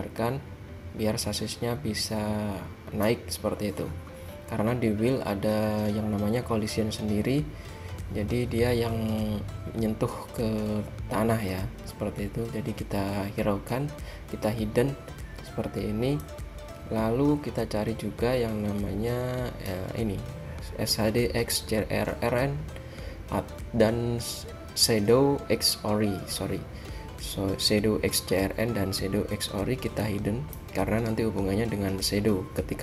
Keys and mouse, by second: 0.1-1.7 drag, 16.4-19.7 drag, 30.3-32.2 drag.